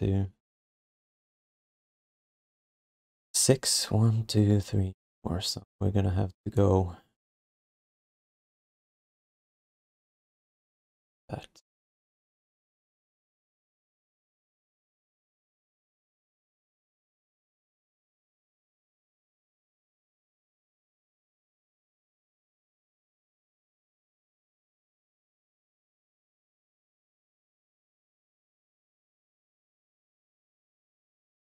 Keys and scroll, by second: 10.8 q, 20.9 ctrl+z, 21.6 ctrl+z, 22.1 ctrl+z, 22.8 ctrl+z, 23.3 ctrl+z, 23.7 ctrl+z, 24.1 ctrl+z, 24.8 ctrl+z, 25.7 ctrl+z, 26.6 ctrl+z, 27.6 w.